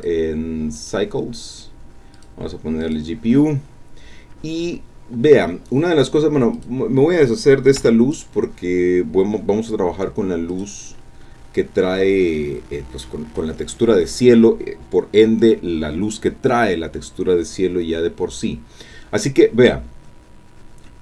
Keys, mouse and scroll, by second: 0.8 click, 2.1 click, 2.8 click, 6.5 click, 7.8 x, 8.1 click, 10.5 click, 12.4-13.6 drag, 13.6 middle click.